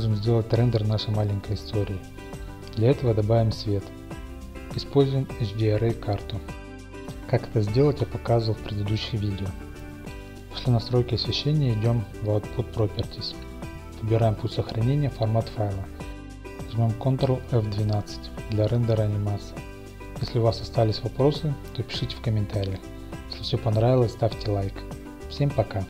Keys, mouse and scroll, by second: 0.0-3.1 drag, 3.1-4.8 middle drag, 4.1 a, 4.8-6.5 drag, 5.9 typing, 6.6-10.2 drag, 10.5-14.6 drag, 14.6-15.6 scroll down 1, 14.6 typing, 15.6 middle click, 16.0 click, 16.2-19.2 middle drag, 21.8 middle click, 22.1 ctrl+F1.